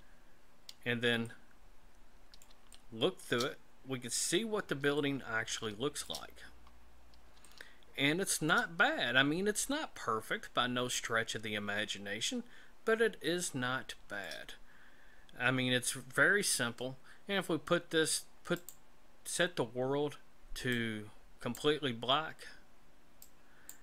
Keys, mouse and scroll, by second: 1.3 middle click, 2.7 shift+middle click, 3.8-4.9 scroll up 5, 5.0 shift+middle click, 6.4-6.9 scroll up 4, 7.5 shift+middle click, 9.4-10.1 scroll up 2, 12.4-12.9 scroll down 3, 13.4 shift+middle click, 14.9-15.4 scroll down 2, 18.6 click, 20.7 click.